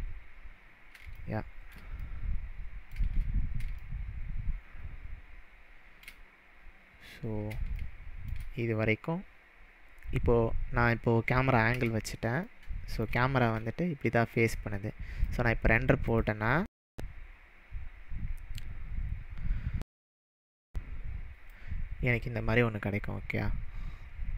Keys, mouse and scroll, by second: 1.2-1.7 shift+middle drag, 3.4-3.8 scroll up 2, 3.8-6.3 shift+middle drag, 6.7-7.5 scroll down 2, 7.8-8.4 shift+middle drag, 11.8 KP_0, 12.5-13.0 middle drag, 15.3-18.4 drag, 21.5-22.4 drag.